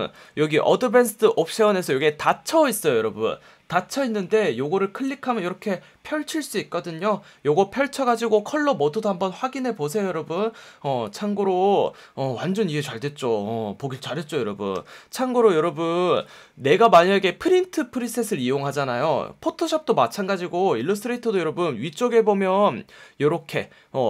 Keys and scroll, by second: 1.8 F1, 4.3 F1, 14.7 F1, 16.1 F1, 21.8 F1.